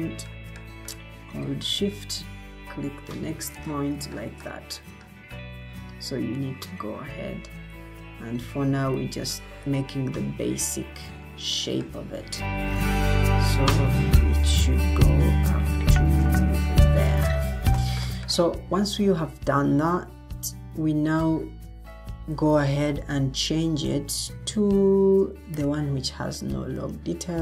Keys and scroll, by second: 22.3 ctrl+t.